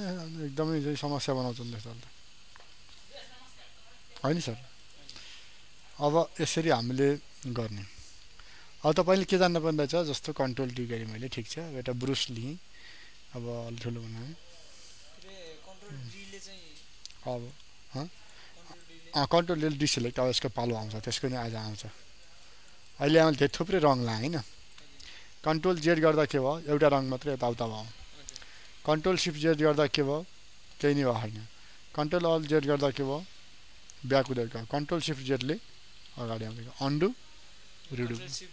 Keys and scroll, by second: 10.9 ctrl+d, 25.8 ctrl+z, 29.1 ctrl+shift+z, 31.4 ctrl+alt+z, 34.5 ctrl+shift+z.